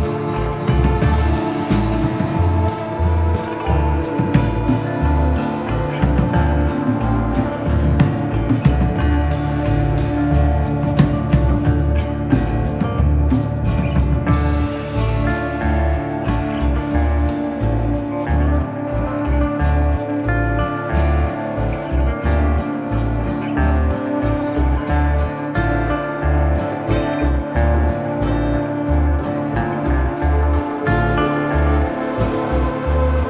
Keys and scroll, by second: 25.3 F3, 26.0 Escape, 26.2 F3, 26.4 Escape, 31.9 F3, 32.1 Escape.